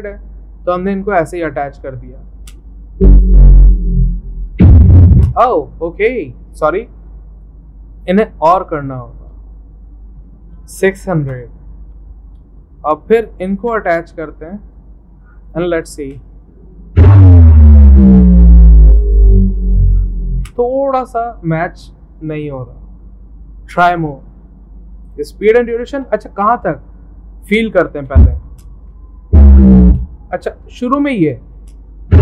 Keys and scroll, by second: 10.4-11.5 typing, 26.0 Escape.